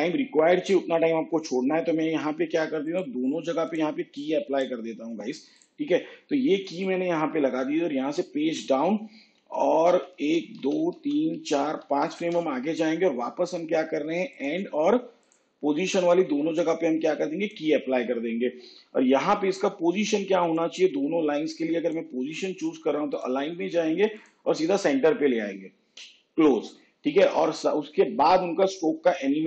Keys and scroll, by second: 8.0 shift+Page_Down, 10.1 ctrl+Right, 21.8 ctrl++.